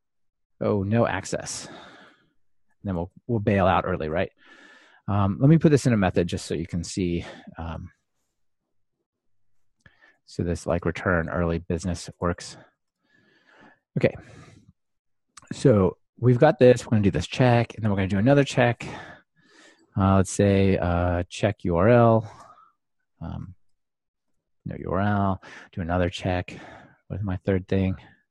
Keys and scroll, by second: 6.7 super+x, 7.7 super+x, 13.0 super+v, 17.0 alt+super+l, 19.0 super+d, 22.5 Return, 24.3 ctrl+alt+shift+Left, 25.9 super+d.